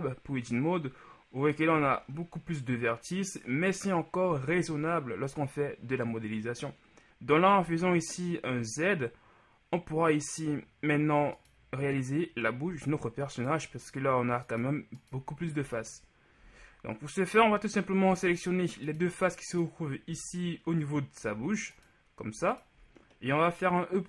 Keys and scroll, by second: 0.1 Tab, 1.9 a, 7.7 z, 12.9 z, 15.7 z, 18.1 z, 20.1 z.